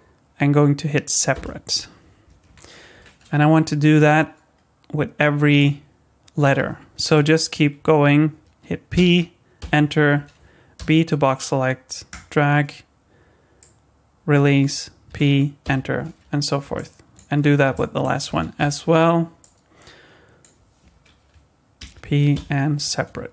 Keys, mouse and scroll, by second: 2.5 Tab, 2.9 Tab, 3.5 b, 8.9 p, 10.8 b, 15.1 p, 16.4 scroll down 2, 16.7 shift+middle click, 17.4 scroll up 2, 17.7 shift+middle click, 18.6 b, 21.8 p.